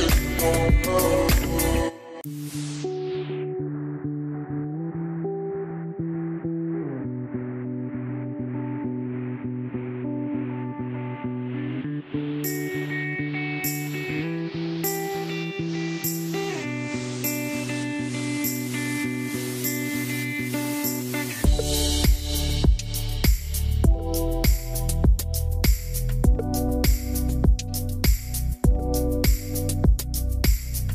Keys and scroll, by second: 19.5 BackSpace, 20.1 8, 20.3 Return, 22.6 BackSpace, 23.0 Return, 29.5 BackSpace, 29.6 Return.